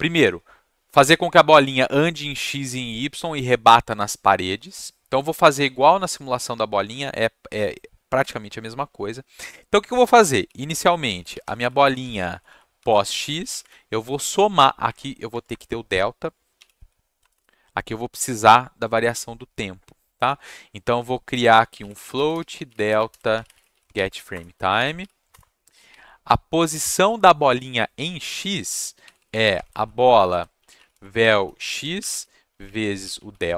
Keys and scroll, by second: 10.4-13.5 typing, 14.8 Up, 15.3 Tab, 15.5 Return, 16.7 r, 17.2 BackSpace, 17.3 BackSpace, 21.4-25.5 typing, 25.6 Down, 26.6 space, 28.7-33.5 typing.